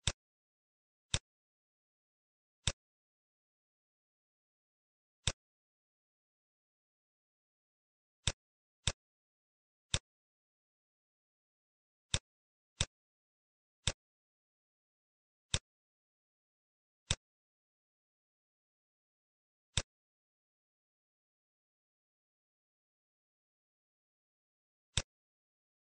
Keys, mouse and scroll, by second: 1.0 click, 5.1 click, 5.2 shift+click, 9.2 shift+a, 13.8 click, 15.3 click, 20.3 click, 22.0 middle click.